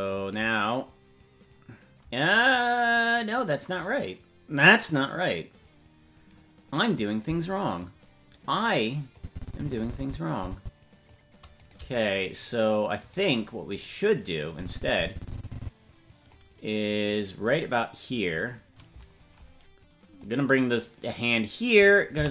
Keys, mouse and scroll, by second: 7.8-9.1 right drag, 9.1-11.1 drag, 11.5-12.6 right drag, 13.1-14.1 right drag, 14.5-16.3 drag, 20.1-21.3 drag, 22.1 i.